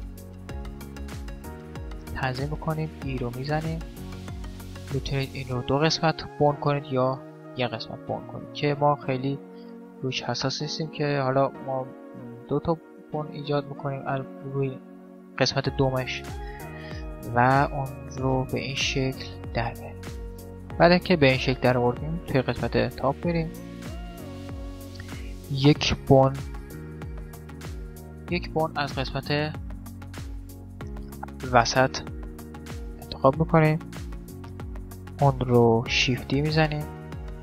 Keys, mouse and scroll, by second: 0.9-2.8 middle drag, 2.3 e, 12.0 e, 16.9-19.7 middle drag, 20.2-21.2 middle drag, 22.2 KP_7, 22.4-25.0 middle drag, 23.7-24.8 drag, 24.8 right click, 26.5 right click, 26.5 shift+d, 26.5 x, 27.0 shift+d, 29.8 x, 30.4 right click, 35.6 shift+d.